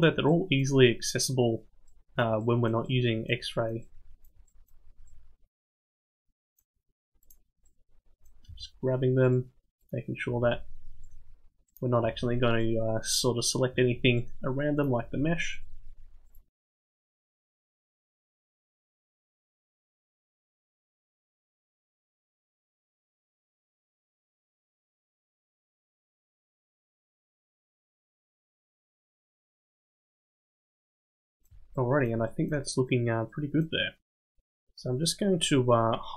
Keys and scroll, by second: 8.5 r, 10.3 r, 12.0 r, 13.7 r, 15.0 r, 17.0 g, 20.6 g, 23.0 g, 24.4 r, 27.2 r, 28.5 g.